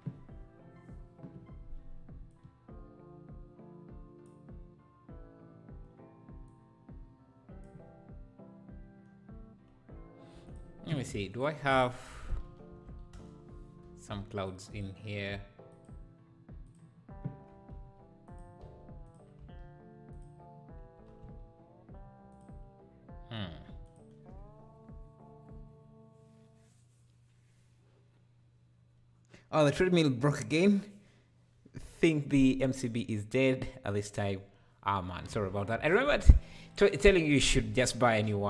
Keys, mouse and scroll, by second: 2.3-5.3 drag, 6.5-9.5 drag, 11.3-17.8 drag, 17.8 s, 18.6 s, 21.0 g, 23.5 x.